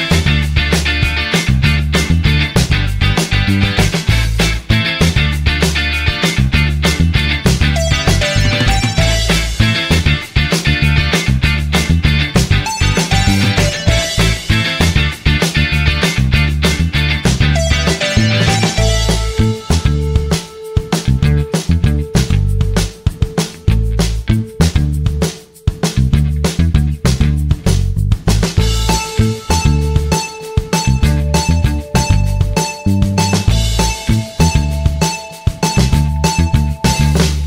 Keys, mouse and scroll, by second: 6.3 1, 18.9 1, 22.6-23.3 typing, 30.5 typing.